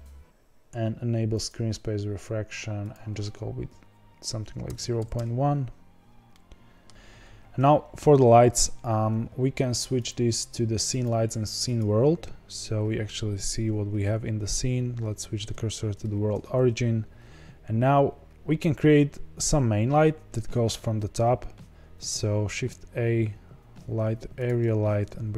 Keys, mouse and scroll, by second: 3.4-6.3 drag, 6.3-6.9 middle drag, 6.9 scroll down 1, 6.9 KP_0, 7.8-9.8 scroll down 2, 10.0-15.4 drag, 15.4 shift+s, 24.4 shift+a, 24.9 g.